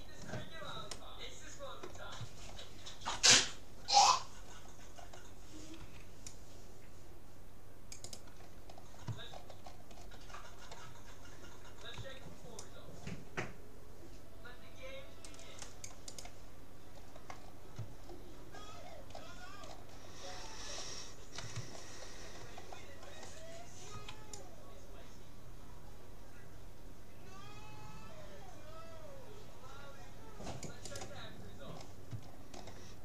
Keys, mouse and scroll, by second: 2.6-6.9 middle drag, 5.9 c, 8.7-12.7 middle drag, 12.1 c, 16.9 middle click, 20.5-21.7 middle drag, 21.7-22.2 scroll up 1, 22.2-24.1 middle drag, 23.9 c, 31.1-32.3 middle drag, 32.3 right click, 32.6-33.0 middle drag.